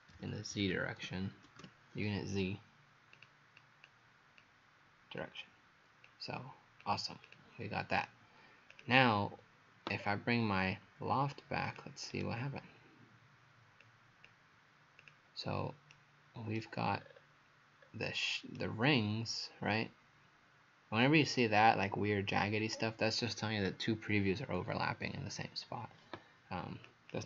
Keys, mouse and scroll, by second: 0.0-2.1 typing, 3.2 click, 3.6 click, 4.4 click, 10.4-10.8 scroll down 2, 11.7 click, 12.1 right click, 15.9 right click, 17.0-17.8 scroll up 5, 18.6 right click, 26.9 click.